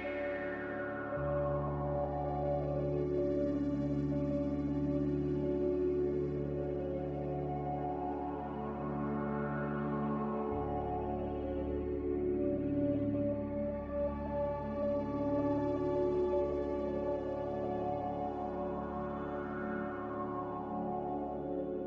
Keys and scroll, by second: 2.2 z, 5.0 typing, 9.1-9.4 typing, 16.6 typing, 18.9 z.